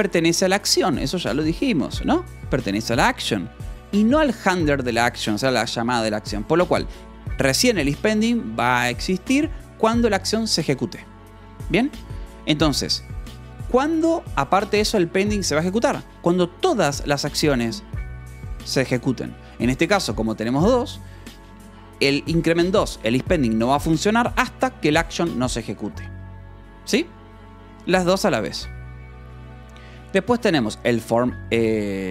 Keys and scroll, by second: 0.0-3.8 typing, 3.6 Escape, 6.9 j, 12.9 j, 13.2 k, 16.5 j, 19.4 Escape, 19.6 k, 20.2 j, 20.8 Escape, 21.9 shift+v, 23.7 Escape, 24.0 j, 25.1 shift+v, 28.0 Escape, 29.4 shift+;, 30.2 j, 30.5 Return.